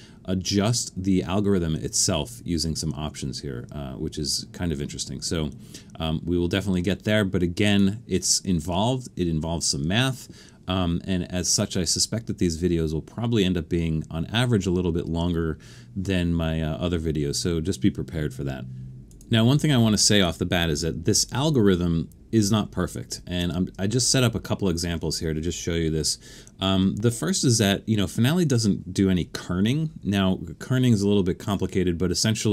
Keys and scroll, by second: 21.1 super+=, 21.7 super+=, 23.3 super+=.